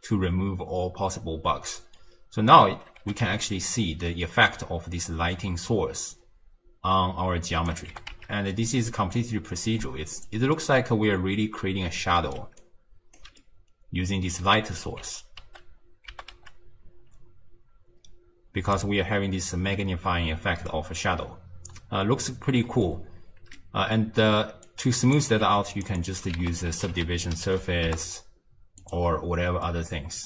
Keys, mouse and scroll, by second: 0.7-2.2 middle drag, 2.2-3.0 scroll down 1, 3.0 g, 8.0 g, 10.6-12.4 middle drag, 12.4 d, 12.6 right click, 13.2 d, 13.5-15.0 middle drag, 15.0 g, 15.5 y, 16.1 g, 20.7-24.7 middle drag, 24.7 click, 25.5 g, 26.0 click, 26.4 ctrl+a, 27.6 Down, 29.7-30.2 middle drag.